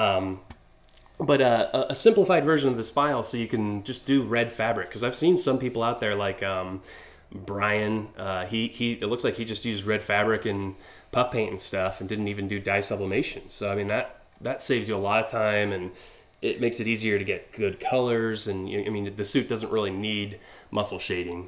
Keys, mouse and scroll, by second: 1.1-1.6 scroll down 4.